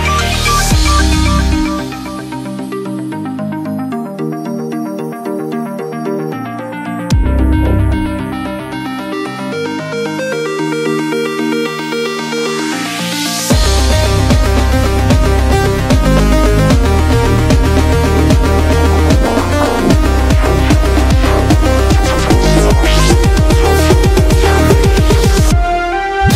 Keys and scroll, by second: 0.4 shift+Up, 0.7 shift+Up, 1.3 p, 1.4 super+=, 1.6 super+=, 15.9-18.7 typing, 21.8 typing, 26.2 typing.